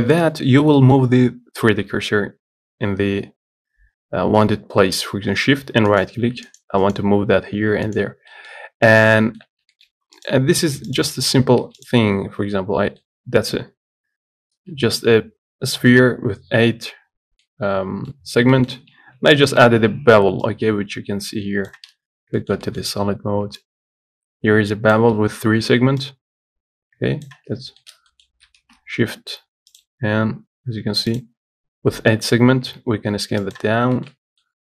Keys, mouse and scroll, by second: 0.1 scroll up 1, 0.3 shift+middle click, 1.3-2.5 scroll up 1, 2.5-6.2 scroll down 2, 6.2-8.5 shift+right drag, 8.5 middle click, 9.4 shift+middle click, 9.7 scroll up 1, 10.0 shift+middle click, 10.5 click, 11.2 click, 11.5 Tab, 13.0 scroll down 1, 13.2-14.3 middle drag, 14.3-17.6 scroll up 1, 17.7-19.4 middle drag, 19.4 Tab, 20.7-22.1 shift+drag, 22.3 z, 22.6-23.9 shift+middle drag, 23.9-27.7 shift+drag, 27.7-28.0 scroll down 1, 28.0-30.0 shift+middle drag, 30.0 shift+a, 33.0 s, 33.9 scroll up 1, 34.2-34.6 shift+middle drag, 34.5 scroll down 1.